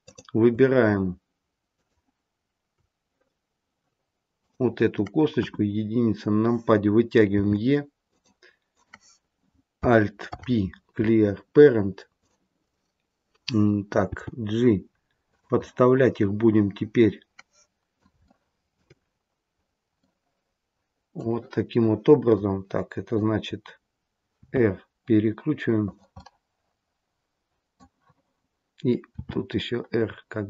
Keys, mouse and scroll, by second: 1.6 shift+click, 4.3 click, 5.3 KP_1, 7.3 e, 8.7 click, 10.3 alt+p, 14.0 g, 15.6 middle click, 18.2 shift+middle click, 18.6-20.0 shift+scroll up 4, 20.0 middle click, 20.0-21.2 scroll up 1, 22.3 middle click, 24.4 r, 26.1 middle click, 29.1 r.